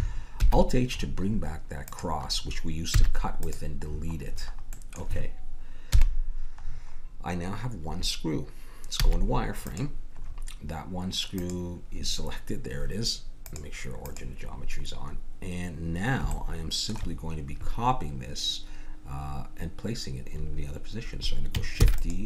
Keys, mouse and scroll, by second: 0.4 alt+h, 1.9-2.9 drag, 2.9 x, 5.9 KP_1, 9.0 z, 11.3-16.5 drag, 21.8 shift+d.